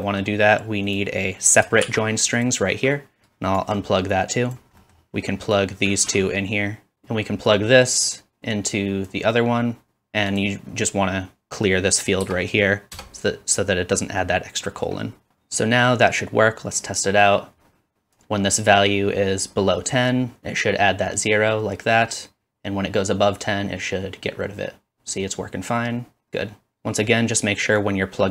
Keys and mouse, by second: 1.8 shift+d, 3.2-4.8 ctrl+right drag, 7.0 ctrl+z, 20.6-23.9 drag, 23.9-26.7 middle drag, 26.7-28.3 drag.